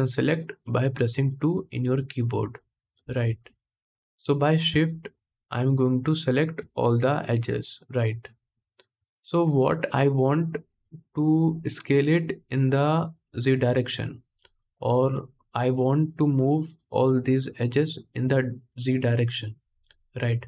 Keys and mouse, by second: 3.5-5.8 middle drag, 5.8 shift+click, 5.9-20.4 shift+middle drag.